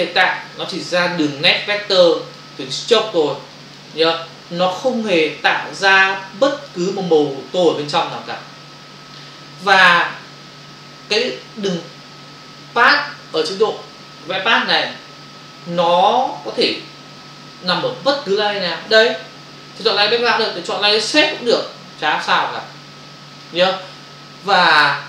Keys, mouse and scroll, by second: 0.3 click, 1.1 click, 2.0 click, 2.8 click, 3.5 click, 3.9 click, 4.6 click, 5.3 click, 6.2 click, 7.6 click, 20.9 click, 21.1 click, 21.3 click, 21.4 double click.